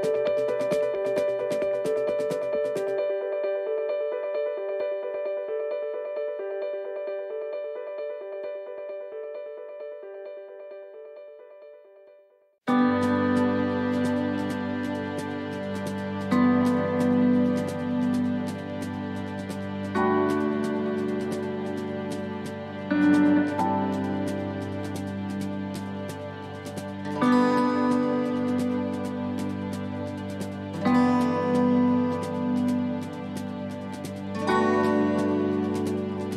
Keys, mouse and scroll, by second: 0.0 middle click, 1.1 middle click, 1.4 shift+middle click, 1.5 shift+middle click, 2.1 middle click, 2.9 shift+middle click, 4.1 u, 7.5 click, 8.3 click, 10.3 o, 13.0 BackSpace, 13.3 BackSpace, 20.6 click, 25.4 click, 33.4 click.